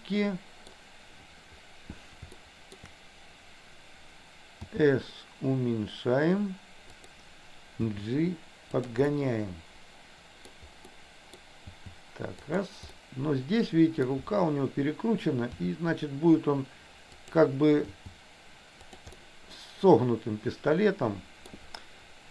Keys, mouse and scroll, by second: 0.8 scroll down 1, 2.5 shift+middle click, 4.7 s, 7.8 g, 9.2-10.6 middle drag, 10.9 scroll up 1, 11.1 middle click, 11.9 g, 13.1-14.2 middle drag, 15.7 r, 18.1 g, 19.3 scroll up 1, 19.4-21.5 middle drag, 21.5 scroll down 1.